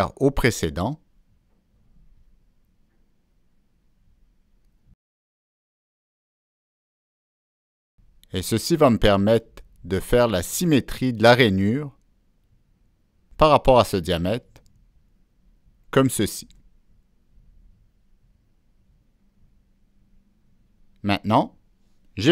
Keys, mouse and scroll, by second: 0.8 Escape, 0.8 click, 1.6 Escape, 1.6 click, 2.9 click, 3.9-4.3 drag, 5.4 click, 7.2 click, 10.3 click, 11.1 Escape, 11.1 click, 12.7 Escape, 12.7 click, 13.2 click, 14.9 click, 16.6 click, 17.7 click, 19.5 click, 21.7 middle click.